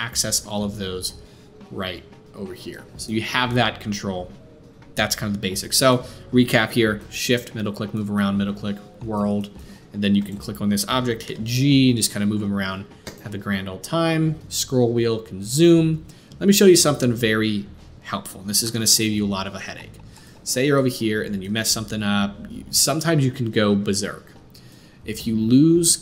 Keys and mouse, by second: 10.2-26.0 middle drag, 11.2 g.